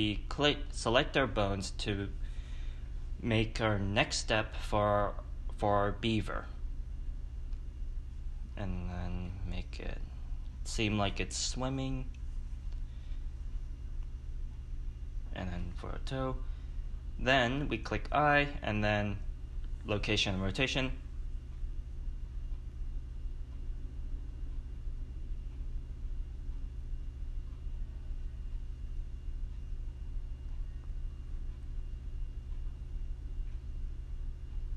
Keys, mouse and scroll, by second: 1.5 click, 5.7 click, 7.8 click, 13.0-14.0 right drag, 13.8 click, 14.6 click, 17.8 a, 19.7 i, 21.4 click, 21.8 a, 22.0 click, 22.6 click, 23.0 ctrl+z, 23.9 i, 24.1 click, 24.5 ctrl+v, 24.7 space, 24.9 click, 24.9 ctrl+z, 25.0 click, 25.0 space, 25.1 space, 25.2 click, 25.5 ctrl+z, 25.7 drag, 25.9 Delete, 26.0 click, 26.7 ctrl+z, 26.9 right click, 27.1-27.6 drag, 28.0 click, 28.8 a, 28.9 i, 28.9 click, 29.0 space, 29.1 space, 29.1 click, 29.3 click, 29.6 click, 29.6 ctrl+z, 29.7 click, 30.2 ctrl+v, 30.3 space, 30.5 space, 30.6 click, 30.7 ctrl+s, 32.3 click, 32.9 click, 33.0-33.9 drag, 33.2 shift+middle click, 33.9-34.7 scroll down 5.